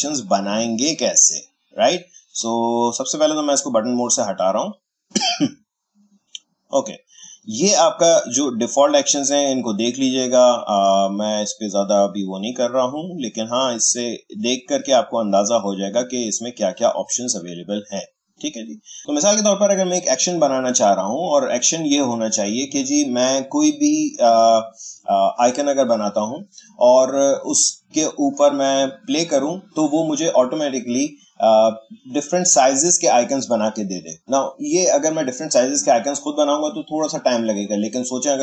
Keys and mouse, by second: 3.5 click, 17.6 click.